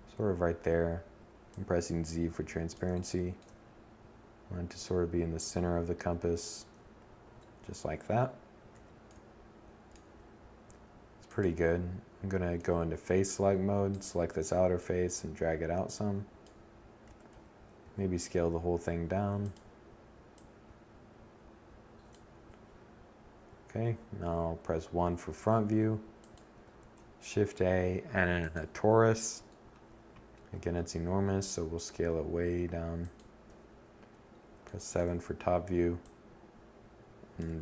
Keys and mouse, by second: 0.6 click, 5.3 1, 6.4 Tab, 7.3 a, 11.1 z, 15.6 a, 15.8 a, 16.3 s, 18.0 click, 20.8 Tab, 22.7 1, 23.9 a, 25.3 shift+a, 29.1 s, 31.6 click, 32.0 7.